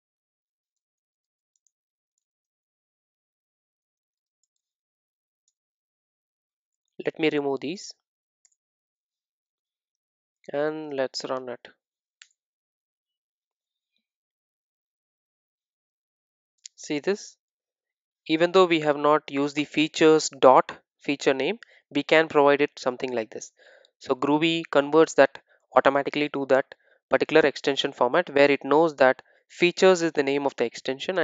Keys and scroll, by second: 10.1 super+s.